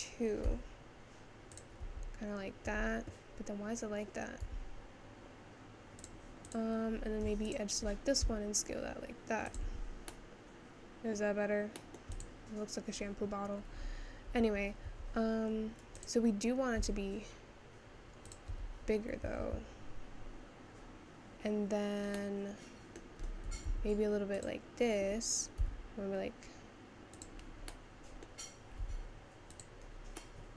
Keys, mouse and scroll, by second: 0.0 click, 0.5 s, 1.8 Tab, 2.7 Tab, 4.4 s, 6.5 click, 8.2 s, 9.7 Tab, 10.1-11.2 middle drag, 11.2-11.8 scroll down 3, 11.8 middle click, 12.2 click, 12.6-14.5 scroll down 1, 14.5 Tab, 14.9 Tab, 15.5-16.0 scroll up 2, 16.0 click, 16.8 s, 18.5 Escape, 19.4 ctrl+z, 20.1-22.3 scroll up 2, 22.3-23.5 middle drag, 23.5 g, 27.7-28.9 middle drag, 28.9 s, 29.9-30.4 scroll down 2, 30.4 middle click.